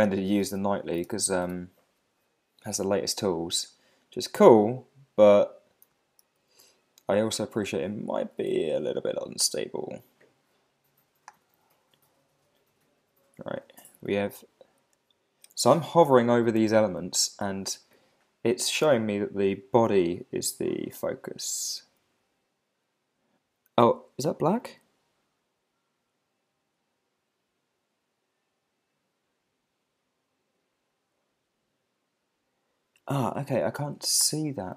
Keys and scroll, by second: 1.4 Return, 6.4 alt+super+i.